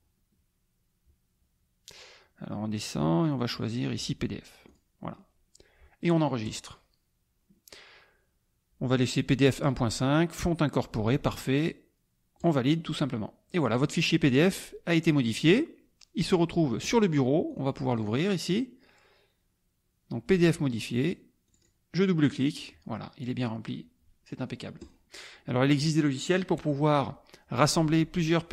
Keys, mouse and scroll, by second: 4.7 click, 6.4 click, 12.4 click, 16.2 click, 17.4 click, 21.4 click, 24.8 click.